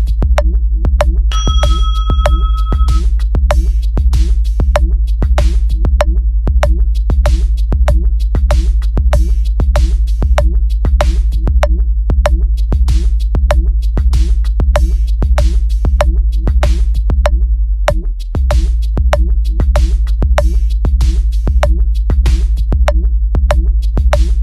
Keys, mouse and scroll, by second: 0.8 click, 0.9 click, 1.6 click, 2.9 click, 3.6 click, 4.5 click, 6.3 click, 6.8 click, 7.0 click, 7.9-8.3 drag, 9.1 click, 10.2 click, 11.3 click, 12.2 click, 13.3 click, 14.0 click, 15.0 click, 15.7 click, 16.8 click, 17.4 click, 19.1 click, 19.7 click, 19.9 click, 21.9 click, 23.2 shift+drag, 24.3 click.